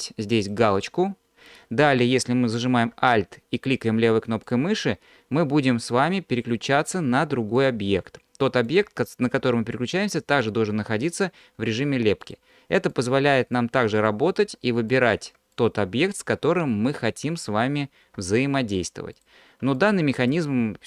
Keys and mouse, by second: 4.5 alt+click, 5.8 alt+click, 7.6-8.8 drag, 12.2 alt+click, 12.9 alt+click, 13.6 click, 14.9 alt+click, 15.6 click, 19.1 alt+click, 19.8-20.8 drag.